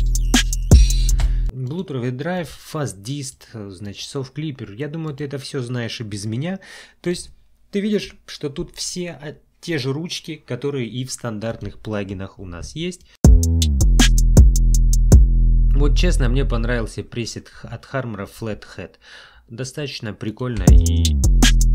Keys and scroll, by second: 1.2 space, 13.1 space, 15.1 space, 20.6 space.